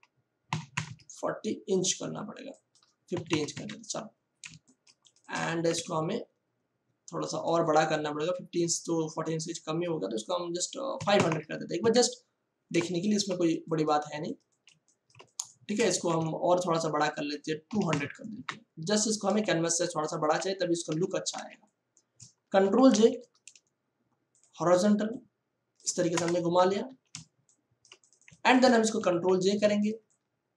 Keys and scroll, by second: 0.5 4, 0.7 0, 3.1 5, 3.3 0, 3.5 Return, 4.4 ctrl+space, 5.6 ctrl+alt+c, 10.9 5, 11.1 0, 11.7 Return, 13.0 ctrl+space, 13.7 space, 16.1 ctrl+alt+c, 17.7 2, 17.9 0, 18.3 Return, 19.3 space, 21.3 v, 22.6 ctrl+j, 22.9 ctrl+t, 24.3 ctrl+t, 26.1 Return, 26.8 ctrl+e, 27.2 ctrl+space, 29.0 ctrl+j, 29.2 ctrl+t.